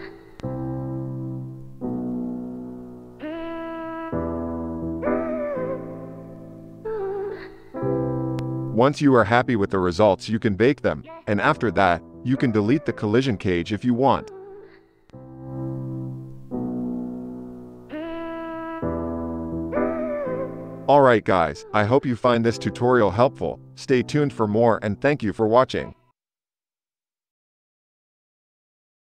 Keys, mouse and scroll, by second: 1.1-9.7 drag, 7.5 space, 8.2 space, 9.1 KP_Divide, 9.7 shift+Left, 10.4 ctrl+Tab, 10.9 drag, 11.2 space, 11.7 click, 11.9 click, 12.1-17.6 drag, 15.0 space, 15.7 KP_0, 20.9 KP_0, 21.6 shift+Left, 22.7 space.